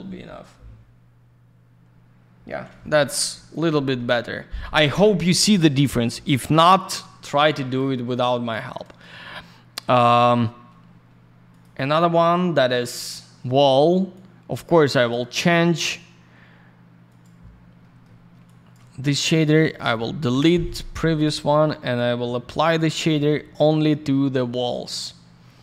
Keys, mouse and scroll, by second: 1.2-1.6 scroll up 1, 1.9-2.2 scroll down 1, 5.8 middle click, 6.0 middle click, 6.1 scroll down 1, 7.5 click, 8.6 middle click, 11.5 click, 11.6 click, 12.2 click, 12.3 click, 14.1 click, 14.9 click, 15.1 click, 15.7 click, 15.9 click, 17.1 click, 17.2 click, 17.8 middle click, 18.4 shift+click, 19.4 click, 20.3 Delete, 20.9 click, 21.6 q, 21.8 click, 21.9 click, 22.7 click, 22.8 click, 23.5 click, 23.6 click, 24.3 click.